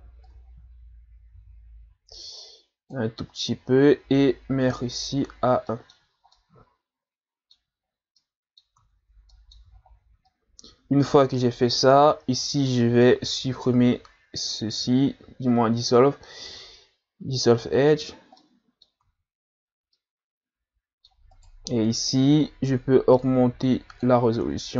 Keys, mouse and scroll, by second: 0.3-3.3 drag, 4.6-5.7 drag, 5.7 middle click, 6.1 a, 6.3-7.8 middle drag, 7.8 scroll up 1, 8.2 middle click, 8.8 Tab, 9.3 middle click, 9.8-10.3 scroll up 4, 10.3-13.1 middle drag, 13.1 x, 18.4 middle click, 19.0 Tab, 19.6-20.0 scroll down 2, 20.0-21.3 middle drag, 21.3 right click, 23.1-24.7 drag.